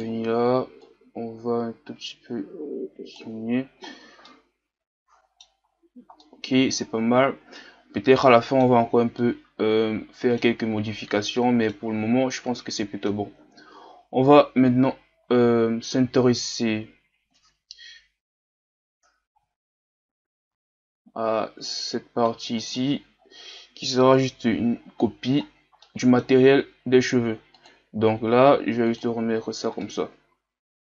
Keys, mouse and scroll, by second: 3.9-4.2 scroll down 4, 4.2-7.1 middle drag, 7.1-7.6 scroll down 2, 7.6-11.0 middle drag, 11.0-11.3 scroll down 1, 11.3-14.3 middle drag, 14.3-15.9 scroll up 3, 15.9-16.3 scroll up 1, 16.3-17.2 scroll down 4, 17.2-19.9 scroll down 1, 19.9-21.2 scroll down 1, 21.2-22.6 scroll up 4, 22.6 right click, 23.2 scroll down 2, 23.9-24.7 scroll up 1, 24.8-25.3 shift+scroll up 1, 25.4-25.8 scroll down 2, 25.8-27.9 middle drag, 27.9-29.9 drag, 29.9-30.8 middle drag.